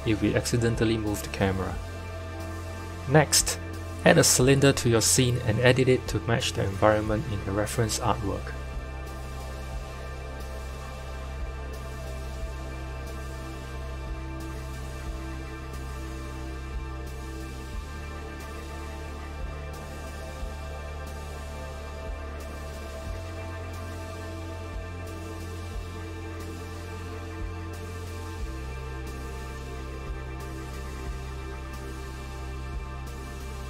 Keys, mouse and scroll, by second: 2.4 click, 2.9 shift+a, 9.2 KP_1, 9.8 z, 10.5-11.3 scroll up 4, 11.3 g, 13.6 scroll down 2, 14.5 Tab, 15.4 a, 16.3 KP_7, 16.9-17.9 scroll down 3, 17.9 s, 25.1-26.9 middle drag, 26.9 z, 28.8 z, 29.9 KP_1, 30.8 click, 32.0 z, 32.7 click.